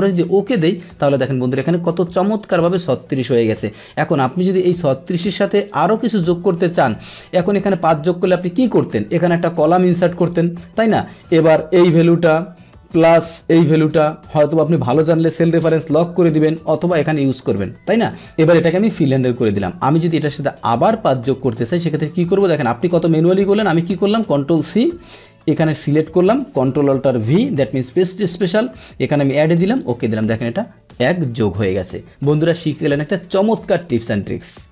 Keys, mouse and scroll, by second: 0.1 click, 2.7 click, 10.3 click, 10.3 right click, 16.4 Return, 17.4-20.3 drag, 20.5 click, 22.2 click, 24.1 ctrl+c, 25.3 click, 27.4 ctrl+alt+v, 29.1 click, 29.7 click.